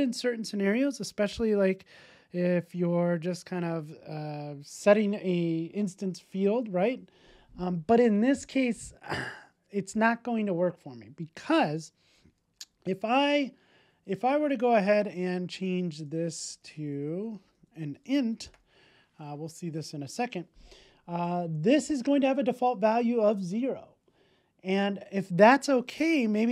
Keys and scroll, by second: 19.6 super+s.